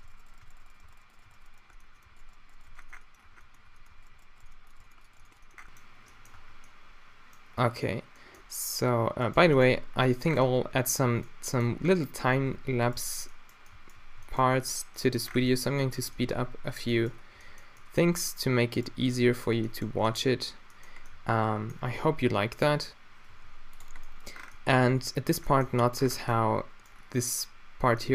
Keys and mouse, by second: 0.0-2.6 typing, 2.3 shift+right drag, 2.7 Tab, 3.2 Tab, 3.6 Tab, 3.9 Tab, 4.1 g, 4.4 g, 4.8 g, 5.1 g, 5.4-6.4 middle drag, 6.4 Tab, 6.8 middle click, 7.3 middle click, 10.8-12.6 middle drag, 12.6 Tab, 13.5-15.1 drag, 14.2 g, 15.1-15.7 middle drag, 15.5 a, 16.1 Tab, 17.4 Tab, 18.8-19.8 drag, 19.0 g, 19.0 middle click, 19.8 middle drag, 19.9 drag, 22.0 g, 23.4 r, 24.6-25.0 middle drag, 25.0 Tab, 25.7 Tab, 26.2 Tab.